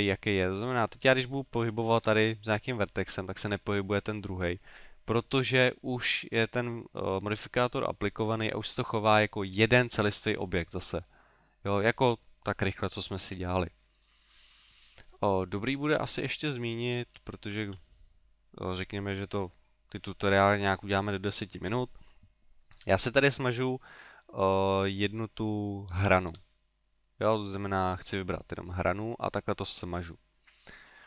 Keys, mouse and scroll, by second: 0.7 right click, 1.3 middle click, 2.0 g, 3.2 click, 5.3 ctrl+z, 8.5 middle click, 11.7 middle click, 14.1 middle click, 14.8 middle click, 15.6 right click, 17.4 shift+right click, 28.9 middle click.